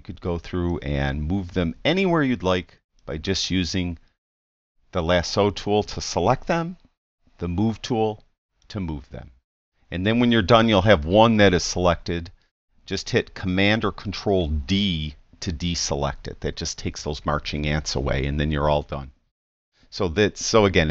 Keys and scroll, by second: 7.2 v, 8.2 v, 14.8 super+d.